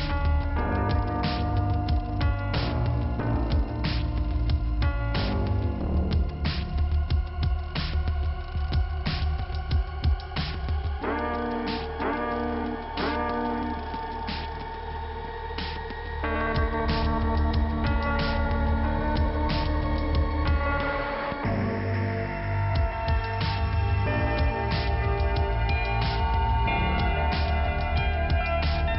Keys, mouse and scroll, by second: 1.4 click, 3.0 click, 3.1 click, 3.3 double click, 3.9-4.5 scroll up 1, 6.5 scroll up 2, 8.9 click, 11.1 click, 12.9 scroll down 2, 15.1 scroll down 1, 17.7 click, 19.3 scroll up 2, 20.9 click, 22.2 scroll up 2, 22.8-23.2 scroll down 1, 25.0 right click, 26.1 click, 27.6 click, 28.0 click, 28.1 double click, 28.8 double click.